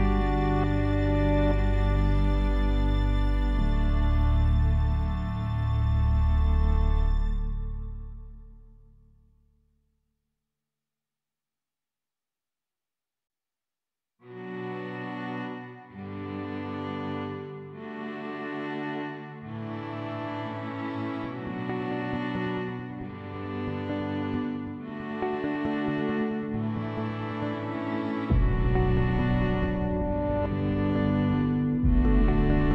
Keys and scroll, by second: 13.3 1, 13.8 Return.